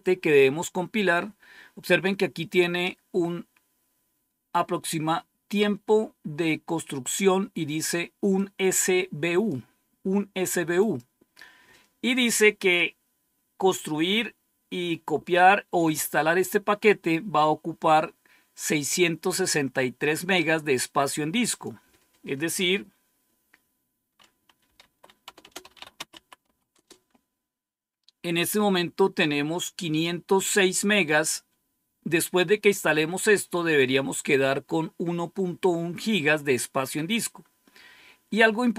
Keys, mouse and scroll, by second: 8.2-9.4 drag, 10.7 click, 18.5-20.3 drag, 20.5 click, 21.4 click, 24.3-26.8 typing, 30.2 click.